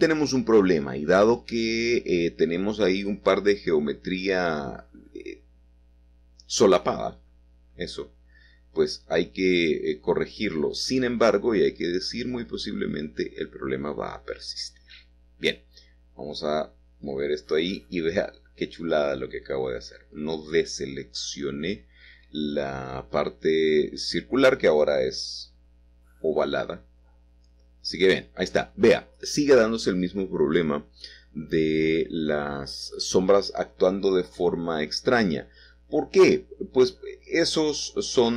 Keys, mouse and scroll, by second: 0.3 middle click, 1.2 middle click, 1.8-3.7 middle drag, 3.7 click, 7.8 Tab, 8.1-9.8 middle drag, 11.0 click, 13.6 c, 14.0-15.3 drag, 16.4 click, 17.0 Escape, 18.4-19.5 drag, 20.1 g, 21.6 y, 23.3 Escape, 24.9 a, 26.6 click, 27.9 c, 28.5 click, 31.2-32.4 drag, 32.5 g, 35.0 click, 35.5 middle click.